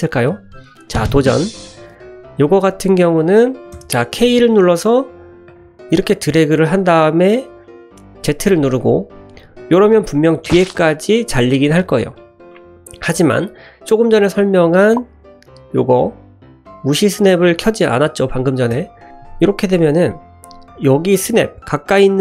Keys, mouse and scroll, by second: 2.1 middle click, 2.9 click, 3.7 k, 20.1 shift+middle click.